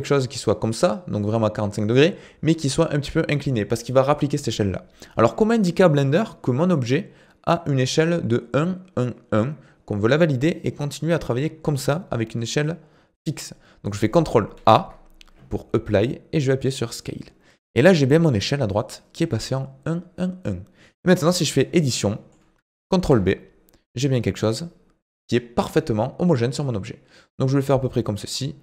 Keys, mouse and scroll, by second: 14.6 ctrl+a, 21.2 Tab, 21.8-23.0 middle drag, 23.0 ctrl+b.